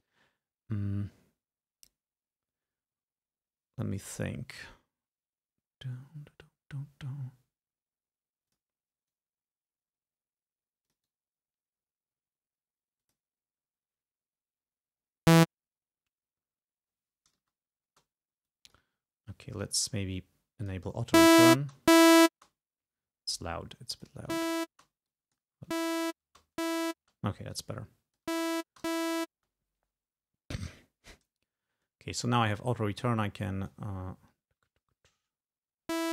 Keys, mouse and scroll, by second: 8.5 click, 9.1-11.3 right drag, 10.9 click, 13.0 click, 17.4 space, 18.6 click, 19.3 click, 20.7 click, 21.2 space, 23.4 click, 24.4 space, 25.2 click, 25.8 space, 27.6-28.7 drag, 28.4 space, 30.6-34.0 drag, 36.0 space.